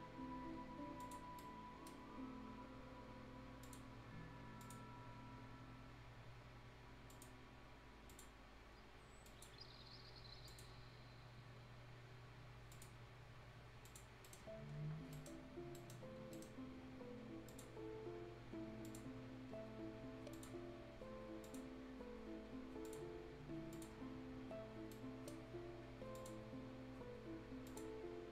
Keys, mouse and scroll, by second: 0.1-0.9 scroll up 1, 0.9 click, 1.2 scroll down 1, 1.3 right click, 2.0 scroll up 1, 3.6 click, 8.3-9.2 scroll up 1, 9.2 click, 9.6-10.4 scroll up 1, 10.4 click, 10.7-11.1 scroll down 1, 11.9 scroll up 1, 12.7 click, 14.0 click, 14.2 right click, 14.4 scroll down 1, 15.1 right click, 15.3 scroll up 1, 15.7 right click, 16.0 scroll down 1, 16.3 right click, 16.7 scroll down 1, 16.9-17.3 scroll up 1, 17.4 click, 17.8 scroll up 1, 18.8 click, 19.0 scroll down 1, 19.2 scroll up 1, 20.3 click, 21.6 scroll down 1, 21.8 scroll up 1, 22.8 click, 23.1-23.7 scroll up 1, 23.7 click, 23.9 scroll down 1, 24.3 scroll up 1, 24.9 right click, 25.4 scroll down 1, 25.5 scroll up 1, 26.1 click, 26.3 scroll down 1, 26.6-27.6 scroll up 1, 27.6 click, 27.9 scroll up 1.